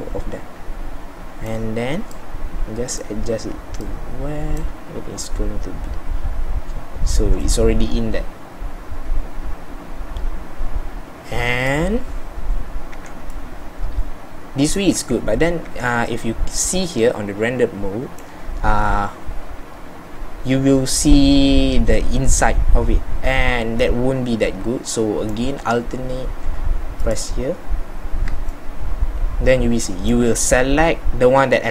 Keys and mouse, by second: 11.5-13.0 middle drag, 13.0 z, 15.1 z, 15.8 z.